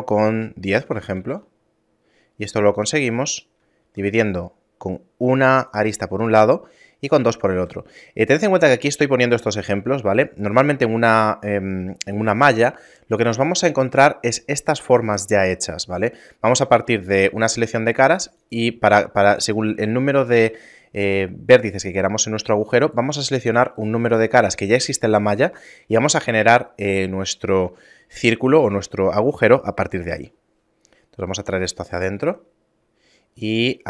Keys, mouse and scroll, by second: 0.7 Tab, 1.2 ctrl+r, 3.8 ctrl+r, 7.6 a, 17.5 ctrl+Tab, 19.2 ctrl+Tab, 22.9 right click, 23.2 shift+right click, 23.5 right click, 23.8 right click, 24.1 right click, 24.4 right click, 30.1 i.